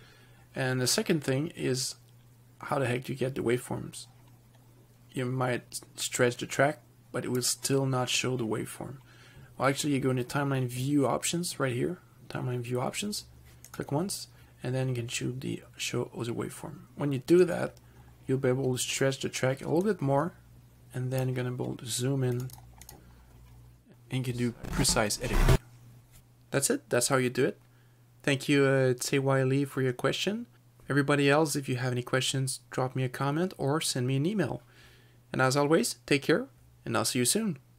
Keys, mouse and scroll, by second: 6.5 click, 13.9 click, 17.7 click, 20.1 click, 22.6 click, 22.7 double click, 23.1 click, 24.6 click, 27.1 ctrl+-, 27.2 ctrl+-.